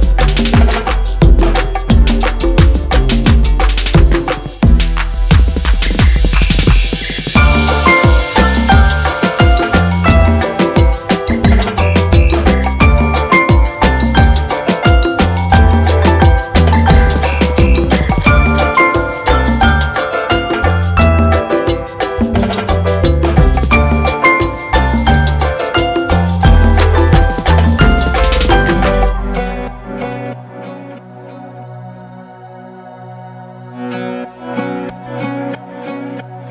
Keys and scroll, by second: 0.5 shift+z, 17.3 e, 18.1 Escape, 19.6 s, 24.4 e, 24.8 z, 29.4 e, 30.0 Escape, 31.0 s, 35.5 e, 36.0 z.